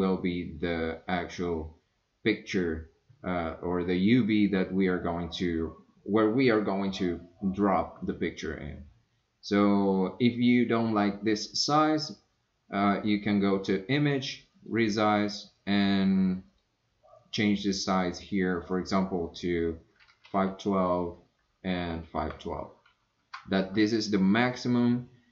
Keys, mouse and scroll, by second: 12.9-25.3 drag.